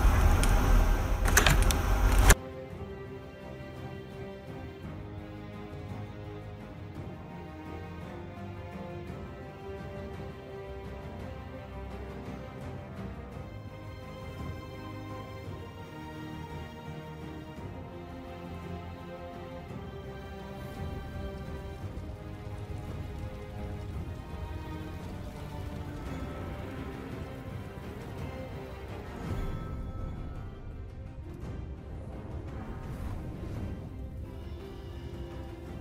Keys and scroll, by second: 3.5 6, 13.0 f, 13.6 f, 14.1 f, 15.3-23.2 typing, 24.4 Tab, 24.5-26.4 typing, 28.7 shift+d, 28.8 Escape, 34.6 ctrl+j, 35.1 shift+d.